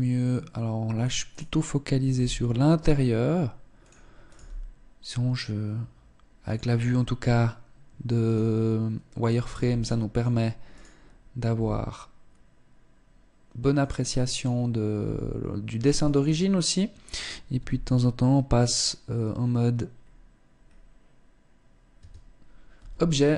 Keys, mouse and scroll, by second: 0.8 right click, 1.8 g, 3.4 g, 7.8 right click, 8.7 right click, 9.2 g, 10.3 right click, 11.2 g, 14.0 right click, 14.6 g, 15.6 Tab, 17.2 z, 18.2-18.8 scroll up 3, 19.5-20.0 scroll down 2, 20.2 scroll down 1, 21.6 Tab, 22.1 z, 22.9-23.3 scroll up 2.